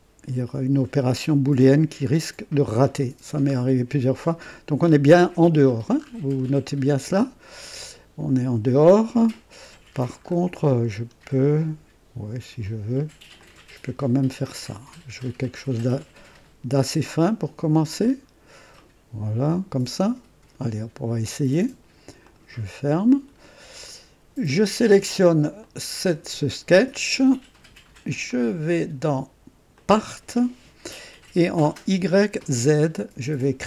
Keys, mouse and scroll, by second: 3.5-3.9 scroll up 2, 5.1-7.0 scroll down 8, 7.2-8.5 right drag, 9.6-10.5 scroll up 4, 10.9 scroll down 2, 13.3-18.2 drag, 18.3-18.6 scroll down 1, 18.8-20.7 right drag, 22.2 click, 23.3-23.6 scroll down 1, 23.8-24.6 right drag, 25.6 click, 29.9 click.